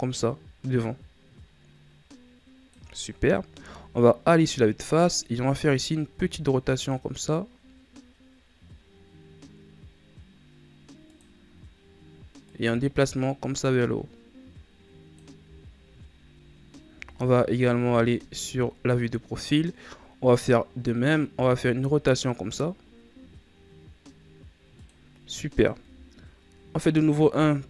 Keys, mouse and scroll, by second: 3.5 KP_1, 6.1 r, 12.4-15.4 drag, 15.5-16.6 scroll down 6, 16.6-17.0 scroll down 1, 17.0 KP_3, 18.2 scroll down 4, 21.2 r, 25.7 KP_1, 27.4 scroll up 4.